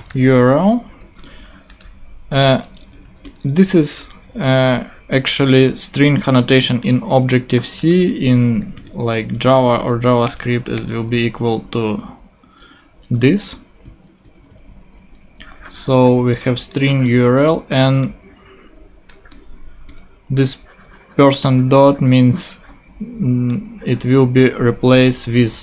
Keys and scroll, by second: 0.0-0.7 typing, 2.4 Return, 2.9 shift+Return, 3.0 shift+2, 3.6 shift+', 8.2-10.2 typing, 13.8 shift+Left, 14.8 shift+super+BackSpace, 15.3 BackSpace, 19.9 BackSpace.